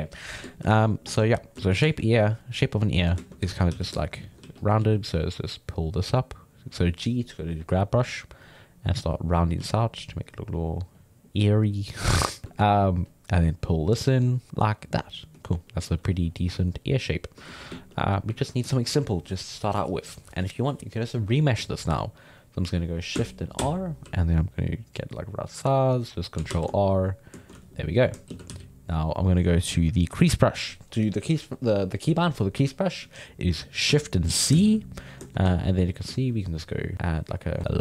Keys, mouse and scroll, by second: 0.8-2.2 middle drag, 2.7 alt+middle click, 3.2 shift+middle click, 3.7 f, 4.2 shift+middle click, 4.4 f, 4.8 f, 5.2-9.6 drag, 9.6 f, 10.0-12.4 drag, 12.4 shift+middle click, 13.1-14.5 drag, 14.5-16.3 middle drag, 17.0 alt+middle click, 17.5-21.1 ctrl+shift+middle drag, 23.6 shift+r, 26.5 ctrl+r, 26.9 middle click, 27.8 alt+middle click, 28.3 shift+c, 28.5 f, 34.5 shift+c, 34.9-36.9 middle drag, 36.9 click, 37.6 ctrl+z.